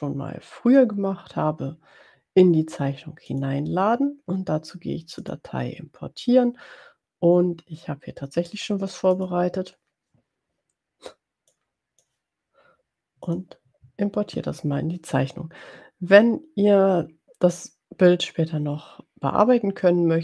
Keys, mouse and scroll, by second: 3.3 click, 5.2 click, 9.3 click, 11.5-12.5 drag, 13.4 click.